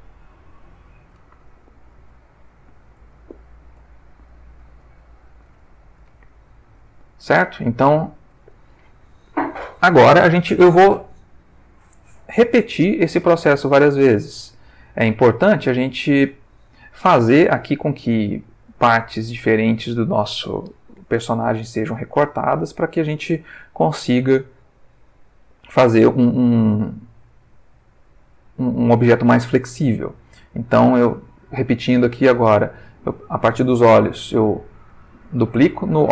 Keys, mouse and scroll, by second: 0.5 click, 1.3-3.1 ctrl+middle drag, 3.3 ctrl+shift+middle click, 4.0 ctrl+shift+middle click, 4.9 ctrl+shift+middle click, 5.7 ctrl+shift+middle click, 7.1 ctrl+middle click, 7.9 ctrl+shift+middle click, 14.2-16.2 ctrl+middle drag, 22.4-23.1 shift+middle drag, 23.7-24.2 shift+middle drag, 24.4 ctrl+shift+middle click, 25.4-25.9 ctrl+shift+middle drag, 26.6-28.4 ctrl+middle drag, 30.0 ctrl+middle click, 32.3 click, 35.1 shift+d.